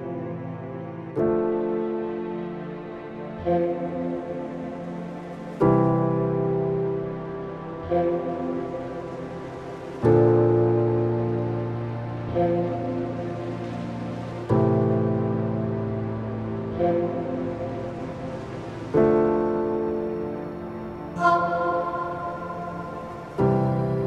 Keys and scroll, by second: 22.7 ctrl+=.